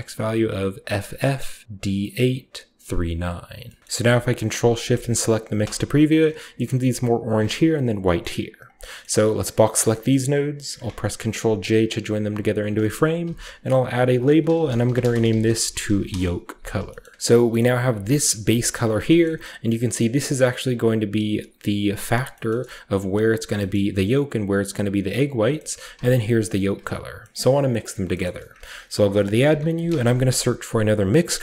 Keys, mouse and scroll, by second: 3.5 scroll down 2, 3.8-4.4 ctrl+shift+middle drag, 4.4 ctrl+shift+click, 4.5 ctrl+shift+middle click, 5.8-6.5 scroll up 1, 6.5-7.7 scroll up 1, 6.7-7.8 shift+middle drag, 7.8-9.8 scroll down 4, 8.1-8.5 middle drag, 8.4-8.7 drag, 8.7 middle click, 8.8-9.3 drag, 8.9 middle drag, 9.3-10.7 middle drag, 9.8-10.7 scroll up 1, 10.5 ctrl+j, 11.1 middle click, 11.2 ctrl+click, 11.6 ctrl+click, 12.4-14.3 drag, 13.1 F2, 14.4-17.6 typing, 16.9 middle click, 17.5-18.3 ctrl+shift+middle drag, 17.5-18.3 scroll down 1, 18.3 ctrl+shift+click, 18.9-21.1 shift+scroll down 1, 19.1-21.1 shift+middle drag, 22.2-23.4 shift+scroll up 2, 22.4-23.4 shift+middle drag, 23.4-24.9 shift+scroll up 1, 23.6-24.9 shift+middle drag, 25.2 click, 25.6 scroll up 2, 26.3 ctrl+shift+drag, 27.7 middle click, 28.1 shift+middle click, 28.2-29.2 scroll up 1, 28.4-29.8 typing, 28.6 shift+click, 30.8 click.